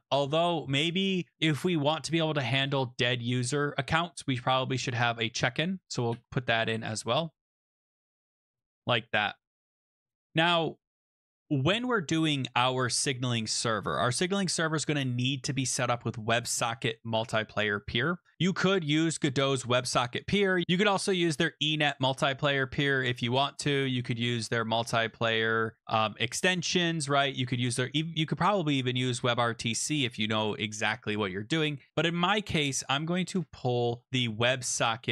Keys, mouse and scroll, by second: 1.6 typing, 2.6 Return, 5.8-9.0 typing, 9.5 Down, 9.7 Return, 18.3 typing, 18.4 click, 20.4-21.1 typing, 20.6 scroll.